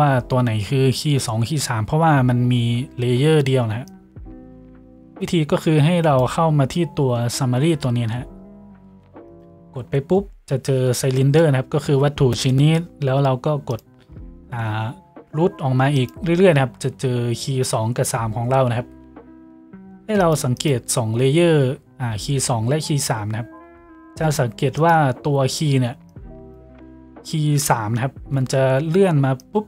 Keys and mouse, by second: 9.6-16.0 middle drag, 16.0 click, 16.2-20.2 middle drag, 20.2 click, 20.4 middle click, 20.6 click, 20.8-24.8 middle drag, 24.8-29.6 drag.